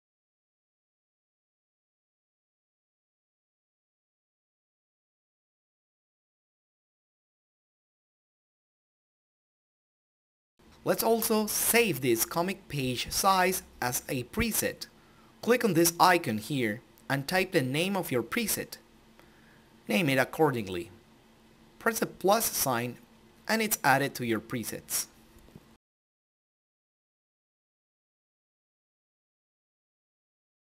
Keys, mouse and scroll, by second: 4.8 F12, 6.5 click, 10.4 click, 14.1 click, 15.6 shift+Num_Lock, 15.6 click, 15.8-16.3 typing, 18.1-18.6 typing, 20.5 x, 22.0 typing, 24.6 click.